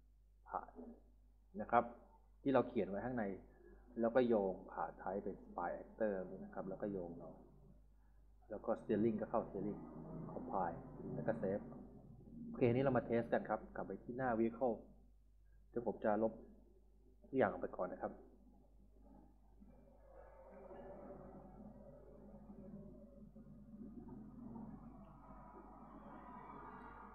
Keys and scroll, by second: 0.0-0.8 typing, 13.8-15.4 typing, 16.8 Delete, 24.1 Delete.